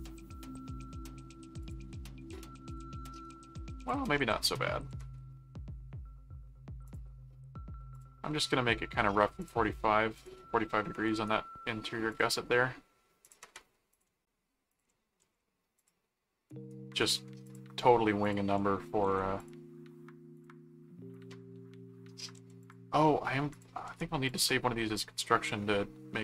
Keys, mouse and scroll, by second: 1.6 click, 2.7 click, 3.8 click, 6.9 click, 7.9 click, 9.4 click, 10.1 click, 11.0 right click, 12.1 click, 13.2 click, 13.9 ctrl+click, 14.7 ctrl+alt+click, 15.2 ctrl+alt+a, 15.7 click, 16.5 right click, 17.4 ctrl+click, 18.2 ctrl+click, 19.1 alt+a, 19.4 click, 20.3 ctrl+click, 21.1 ctrl+click, 22.3 alt+a, 22.6 alt+click, 23.5 alt+click, 23.8 alt+c, 24.3 click.